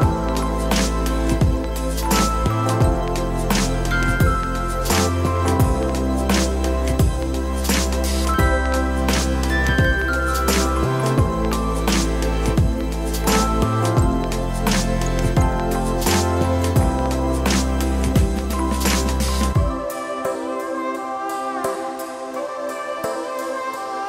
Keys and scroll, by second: 1.5 Tab, 5.0 s, 8.2 shift+d, 21.8 ctrl+i, 22.6 h.